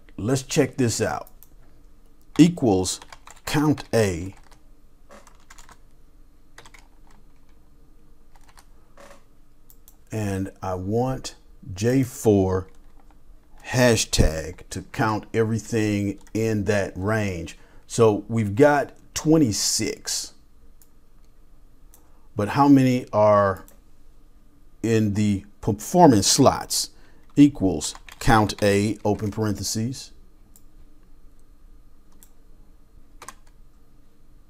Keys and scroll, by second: 2.4-4.2 typing, 5.5-6.6 typing, 8.3 typing, 9.7 typing, 13.8-14.7 typing, 27.3-29.0 typing, 30.5-33.7 typing.